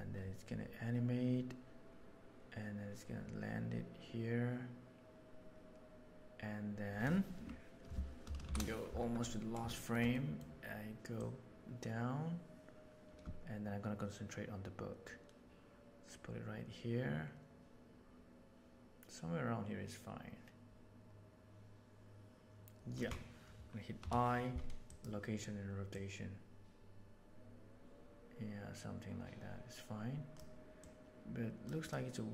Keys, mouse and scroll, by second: 4.3-7.0 right drag, 8.4 shift+Right, 9.7 shift+middle click, 10.1 middle click, 11.2 right click, 11.4-21.5 middle drag, 25.9-30.3 right drag, 30.7-31.9 right drag.